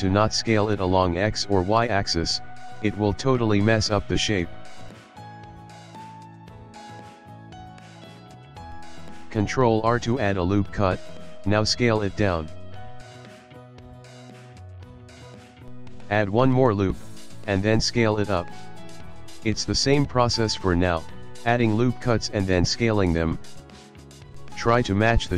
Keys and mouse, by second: 0.0 shift+middle click, 1.5 ctrl+middle click, 1.9 shift+middle click, 2.5 s, 5.1 ctrl+middle click, 5.4 shift+middle click, 5.5 shift+middle click, 5.7 ctrl+middle click, 5.9 ctrl+middle click, 6.9 ctrl+middle click, 7.0 shift+middle click, 7.2 shift+middle click, 8.4 shift+middle click, 8.7 click, 9.7 ctrl+r, 11.8 s, 14.3 shift+middle click, 15.6 ctrl+middle click, 16.2 ctrl+r, 17.7 s, 19.4 shift+middle click, 19.9 shift+middle click, 20.8 ctrl+r, 22.0 s, 24.4 shift+middle click.